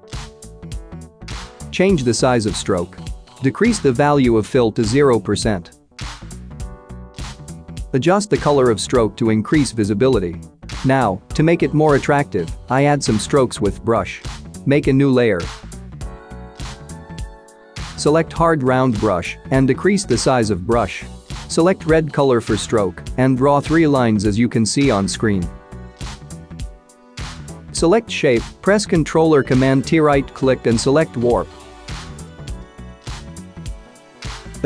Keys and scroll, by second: 15.9 Caps_Lock, 16.0-16.7 typing, 21.4 x, 29.3 ctrl+t, 30.4 ctrl+t.